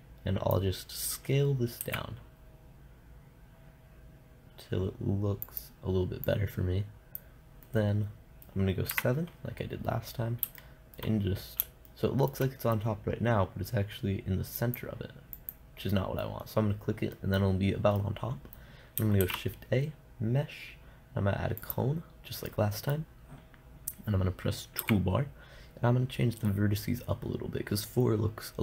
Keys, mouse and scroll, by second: 0.0-2.0 drag, 2.2 s, 4.6-5.8 drag, 6.7-8.1 drag, 8.1-10.0 middle drag, 9.4 KP_7, 11.0-15.0 middle drag, 15.0-17.6 drag, 17.6-20.7 middle drag, 19.6 shift+a, 23.1-26.0 middle drag, 25.2 t.